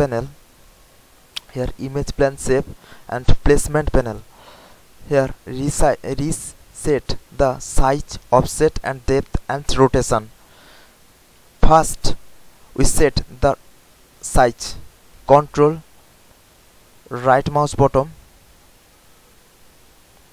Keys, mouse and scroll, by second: 4.4 scroll down 1, 16.8 ctrl+click, 17.9 ctrl+click.